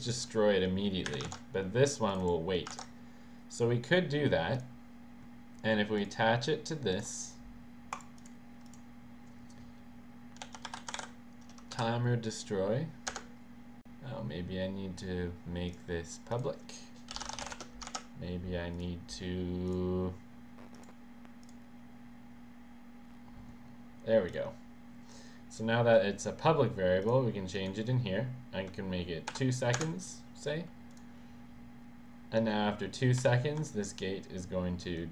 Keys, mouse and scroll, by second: 1.1 Delete, 1.3 ctrl+s, 2.1 click, 2.2 click, 2.7 ctrl+s, 4.5 click, 6.9 click, 8.1 click, 8.3 click, 8.7 click, 10.3-11.5 typing, 11.7 Down, 13.1 Return, 15.0 click, 15.7 click, 16.3 click, 17.1-18.0 typing, 18.8 click, 19.7 click, 20.8 click, 21.5 click, 24.3 click, 27.0 click, 27.6 click, 29.8 Return, 30.0 click, 30.9 click, 33.3 w.